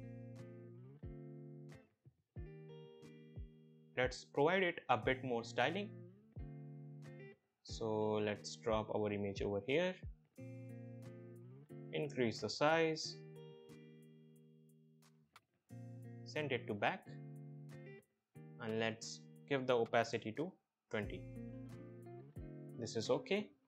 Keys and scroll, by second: 0.3 shift+Right, 3.1 shift+Right, 20.2 BackSpace, 20.6 2, 20.7 0, 21.0 Return.